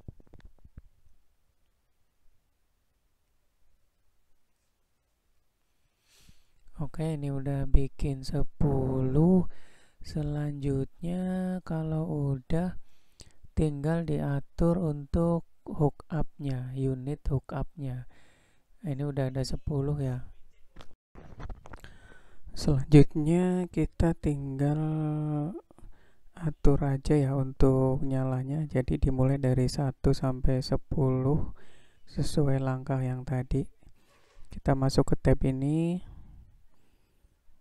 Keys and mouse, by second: 3.4 shift+d, 6.7-7.3 middle drag, 8.0-8.6 shift+middle drag, 31.0-32.4 drag, 34.0 click.